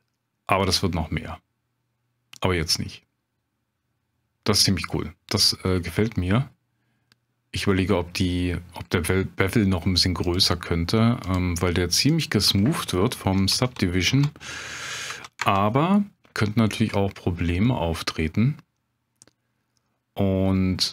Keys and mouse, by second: 10.3 drag, 11.4-16.4 drag, 13.6 BackSpace, 17.6-20.4 middle drag.